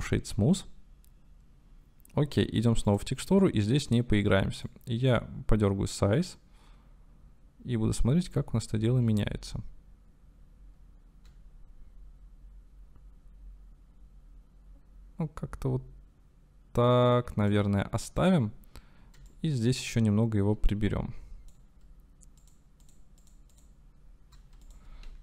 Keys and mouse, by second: 2.9 click, 4.7-7.4 drag, 8.1 click, 22.4 click, 22.8 click, 23.2 click, 23.5 click, 24.7-25.2 drag.